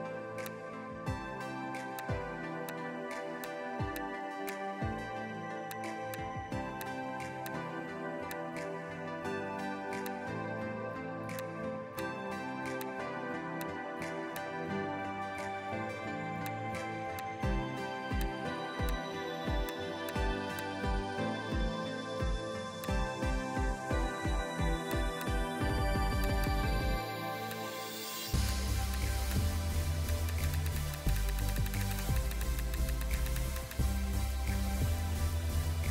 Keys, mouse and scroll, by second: 1.0 x, 2.5 space, 5.5 space, 11.2 space, 15.3 space, 16.0 ctrl+z, 16.2 space, 20.6 click, 22.7 space, 24.1 ], 24.2 ], 24.2 ], 26.3 double click, 30.2 double click, 35.4 scroll down 1.